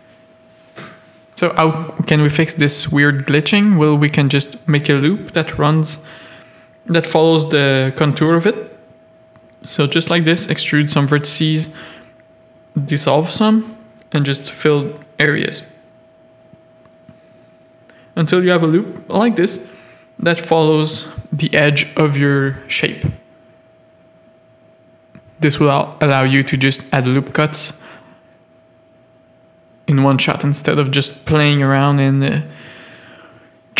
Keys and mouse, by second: 2.0 click, 2.2 x, 2.8 a, 3.8 e, 5.1 click, 5.5 e, 7.0 shift+click, 7.8 f, 8.1 a, 8.6 ctrl+r, 9.7 a, 10.6 f, 10.8 a, 11.4 x, 12.5 a, 13.3 f, 13.6 a, 14.8 ctrl+r, 15.7 a, 18.6 click, 18.7 a, 21.9-25.1 typing, 22.1 click, 23.0 ctrl+r, 24.8 Tab, 25.8 Tab, 28.9 click, 29.6 ctrl+r, 32.4 a.